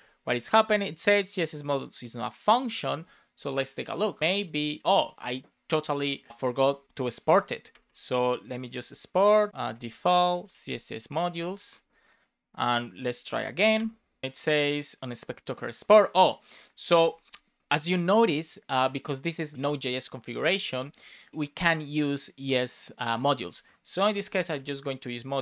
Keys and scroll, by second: 7.6 Return, 9.5 space, 10.1 space, 11.2 Return, 11.5 super+s, 13.5 Up, 13.7 Return.